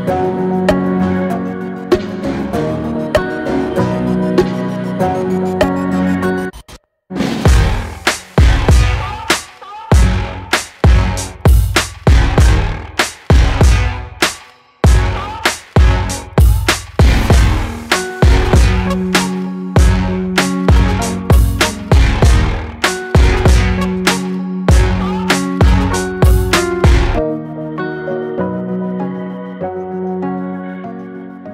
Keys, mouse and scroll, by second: 1.7 click, 2.7-4.6 drag, 4.6 Tab, 5.0-5.5 scroll up 1, 5.5 shift+middle click, 5.8-7.0 scroll up 1, 7.0-8.9 drag, 11.0-13.0 drag, 17.1-19.1 drag, 20.6-21.8 middle drag, 21.8 click, 22.2 shift+click, 22.5 middle click, 23.5 e, 25.3 middle click, 25.7 Tab, 26.0-27.9 middle drag, 28.6 click, 28.8 scroll down 3, 29.1-30.4 middle drag, 30.4 ctrl+z, 30.7 ctrl+z.